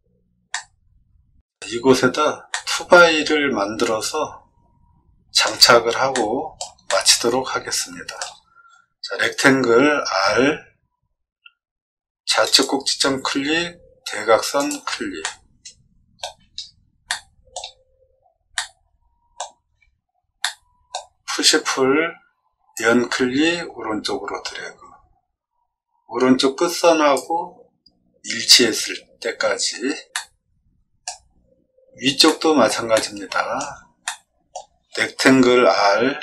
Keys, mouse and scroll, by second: 0.5-1.5 middle drag, 2.5-5.4 middle drag, 6.1 shift+middle click, 6.8-8.1 middle drag, 9.7 r, 12.4 click, 14.5 click, 15.2 middle click, 16.2 middle click, 16.2 middle click, 16.5 middle click, 17.0 shift+middle click, 18.5 middle click, 20.4 middle click, 21.2 p, 22.7-27.1 drag, 28.7 scroll down 2, 30.1 middle click, 32.2 shift+middle click, 32.9 middle click, 34.0 middle click, 36.1 r.